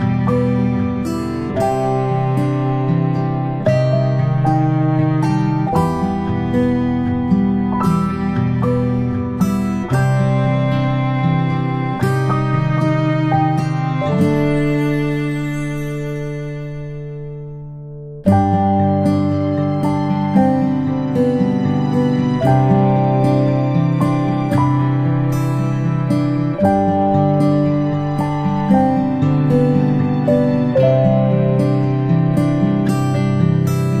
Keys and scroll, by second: 6.0 ctrl+alt+a, 6.4 typing, 18.5 ctrl+alt+space, 18.8 ctrl+alt+space, 33.7 ctrl+space.